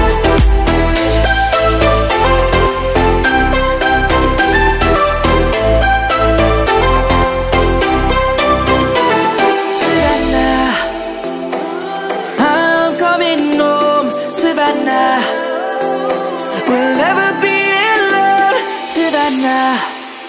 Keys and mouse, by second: 8.0 shift+a, 9.0 click, 11.2 ctrl+z, 11.9 shift+a, 13.1 click, 15.2 s, 19.5 z.